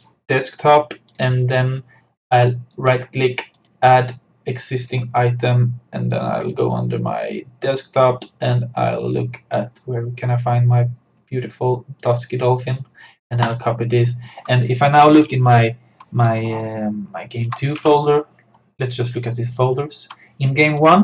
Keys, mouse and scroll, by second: 2.8 right click, 3.6 click, 12.0 click, 15.3 alt+Tab, 17.4 alt+click, 17.8 super+d, 18.9 click.